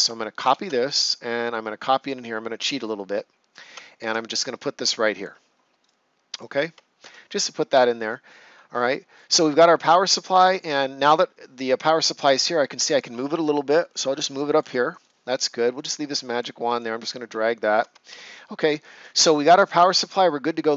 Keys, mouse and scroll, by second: 0.4 ctrl+c, 2.5 click, 5.1 click, 5.7 right click, 6.3 click, 7.0 ctrl+s, 7.7 ctrl+scroll down 1, 8.2 right click, 10.4 click, 17.4 ctrl+scroll up 1, 18.0 ctrl+s.